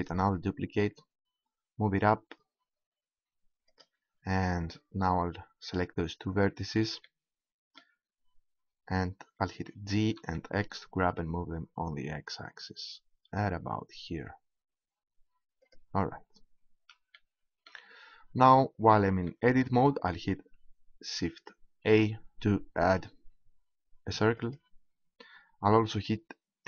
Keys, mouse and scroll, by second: 3.8-5.5 drag, 5.7-7.4 right drag, 7.4-9.6 middle drag, 9.6 g, 15.7-18.0 drag, 21.8 shift+a.